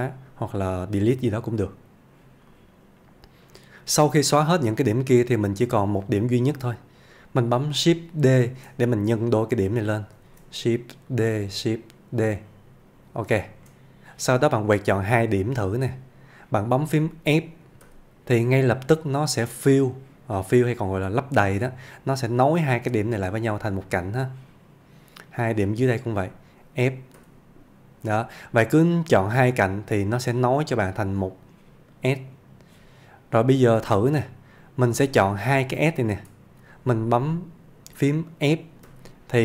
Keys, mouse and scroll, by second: 1.5 click, 5.3-6.3 click, 8.5 shift+d, 9.9 click, 10.3 shift+d, 11.2 click, 11.5 shift+d, 12.4 click, 13.5 shift+middle click, 14.7-15.9 click, 17.8 f, 19.1 scroll up 1, 24.4-25.3 click, 27.3 f, 29.0 middle click, 32.3 click, 36.0 shift+click, 38.9 f.